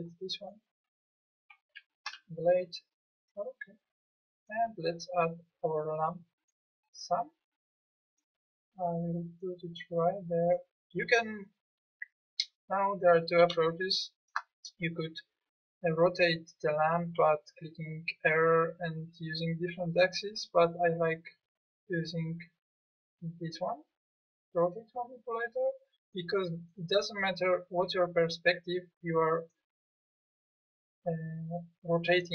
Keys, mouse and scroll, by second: 2.1 Delete, 21.1 click, 26.2 middle click.